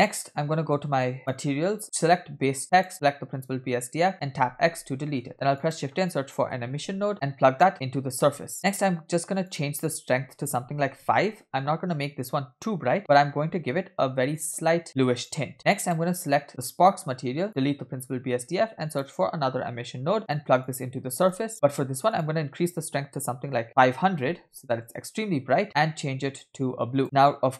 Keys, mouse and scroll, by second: 1.2 click, 2.7 click, 4.6 x, 5.3 shift+a, 7.7-8.5 drag, 8.5-9.3 scroll up 3, 8.6 middle click, 9.4-11.4 drag, 13.0 click, 15.8 click, 17.0-17.4 scroll down 2, 17.5 click, 18.0 x, 18.6 shift+a, 21.3 alt+right click, 21.7 scroll up 2, 22.1-24.8 drag, 24.8 0, 25.6 click, 27.0-27.4 scroll up 5.